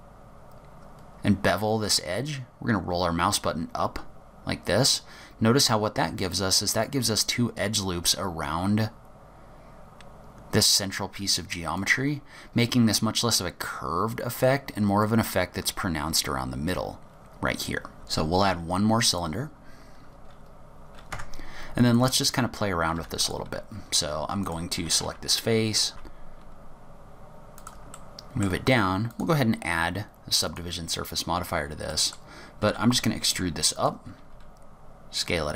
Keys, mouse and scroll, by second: 12.6-14.3 scroll up 1, 14.3-14.8 scroll up 5, 16.1-17.4 scroll down 12, 17.4 scroll up 3, 17.9 scroll down 1, 18.0 g, 19.8-20.7 scroll up 9, 21.2 Tab, 22.0 click, 23.0 4, 23.3 click, 24.5 click, 24.8 g, 25.9 click, 25.9 middle click, 25.9 3, 25.9 g, 28.0 middle click, 29.2 click, 31.2-32.0 scroll up 2, 32.0 middle click, 32.8 e, 34.2 s.